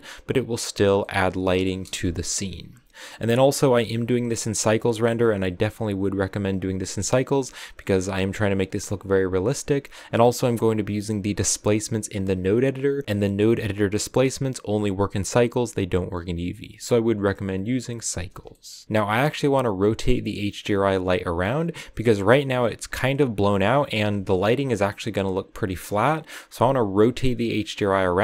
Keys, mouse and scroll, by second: 3.4 KP_0, 23.4-23.8 scroll up 2, 23.8 KP_0.